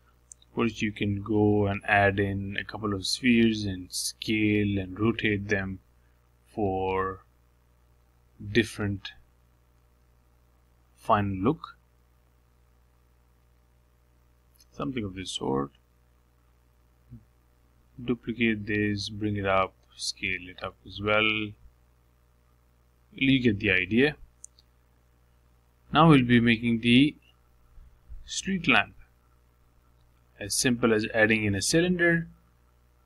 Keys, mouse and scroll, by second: 0.2 g, 2.4 shift+d, 4.3 g, 6.6 r, 9.8 shift+d, 12.7 d, 13.4 g, 16.2 s, 18.9 click, 19.7 shift+d, 21.4 s, 25.3 middle click, 25.8 click, 26.2 middle click, 26.7-28.2 scroll down 1, 28.3 click, 28.9-29.2 scroll up 2, 29.2 shift+middle click, 30.0-30.9 scroll up 1, 30.9-32.0 shift+middle drag, 32.0 shift+right click, 32.7 shift+a.